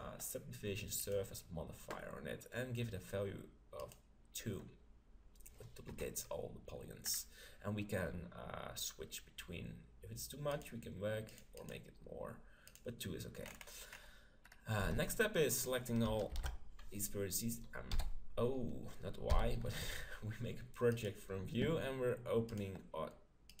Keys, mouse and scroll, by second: 3.8-5.6 drag, 5.9 KP_7, 7.1-9.0 middle drag, 10.5-13.9 drag, 13.6 middle click, 13.9-16.4 middle drag, 14.3 click, 14.8 Tab, 16.3 ctrl+l, 17.9 y, 19.3 u, 22.5-23.6 drag.